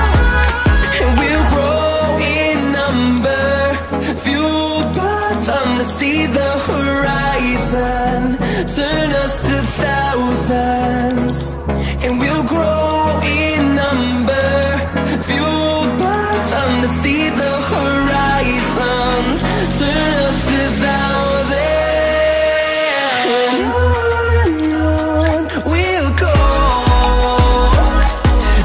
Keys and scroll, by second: 7.3 ctrl+alt+z, 7.7 ctrl+alt+z, 21.5 ctrl+alt+z, 22.6 ctrl+alt+z.